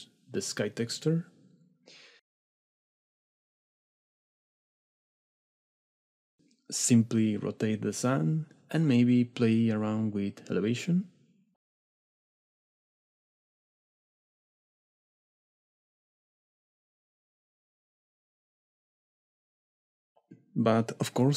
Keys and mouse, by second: 5.1 shift+drag, 5.6-7.5 middle drag, 7.5-15.3 drag, 17.0 middle click, 17.4 click, 17.6-20.2 drag.